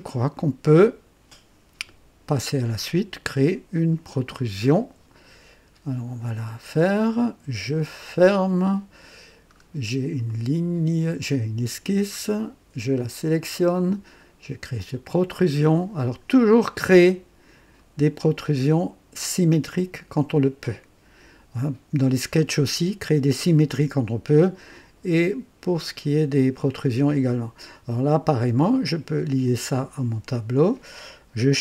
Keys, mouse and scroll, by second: 7.8 click, 9.4-9.7 scroll down 1, 10.2-11.3 right drag, 13.0 click, 14.7 click, 20.1 click, 29.2 click.